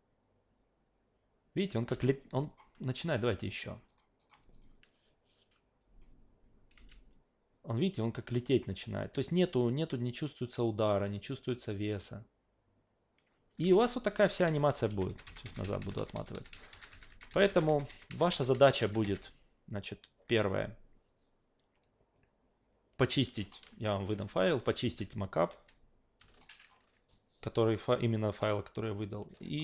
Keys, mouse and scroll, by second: 1.9 alt+v, 2.2 click, 3.3 click, 3.6 click, 3.9 click, 4.2 click, 6.8 alt+v, 9.4 click, 11.3 click, 13.6 alt+v, 14.3 ctrl+z, 14.5 ctrl+z, 14.7 ctrl+z, 14.9 ctrl+z, 15.1 ctrl+z, 15.2 ctrl+z, 15.4 ctrl+z, 15.6 ctrl+z, 15.8 ctrl+z, 16.0 ctrl+z, 16.1 ctrl+z, 16.3 ctrl+z, 16.5 ctrl+z, 16.7 ctrl+z, 16.9 ctrl+z, 17.1 ctrl+z, 17.3 ctrl+z, 17.5 ctrl+z, 17.7 ctrl+z, 17.9 ctrl+z, 18.1 ctrl+z, 18.3 ctrl+z, 18.5 ctrl+z, 18.8 ctrl+z, 19.0 ctrl+z, 19.6 alt+middle click, 23.5 alt+middle click, 24.3 alt+middle click, 25.5 ctrl+z, 26.4 alt+middle drag, 29.5 alt+middle drag.